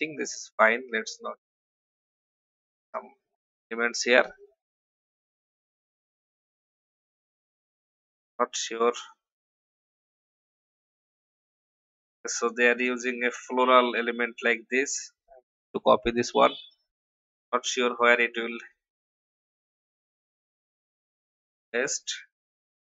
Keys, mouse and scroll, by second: 11.3 alt+scroll up 1, 12.7-13.1 scroll down 1, 13.5 click, 13.9 v, 15.4 ctrl+c, 16.0 click, 17.0 ctrl+v, 19.2 shift+click, 20.5-22.2 drag, 22.5 i.